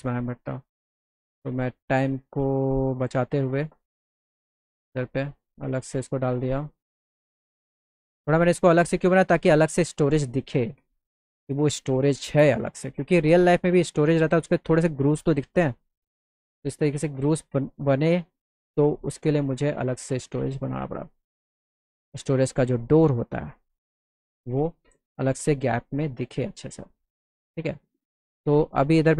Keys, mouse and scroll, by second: 0.8 click, 1.9-3.2 drag, 4.2 alt+middle click, 5.4 click, 6.2 alt+middle click, 11.0 z, 11.4 middle click, 13.3 middle click, 13.7 middle click, 14.4 middle click, 15.4 middle click, 16.9 click, 17.9 click, 18.7 click, 20.7 click, 22.2-23.4 drag, 23.6 middle click, 25.2 z.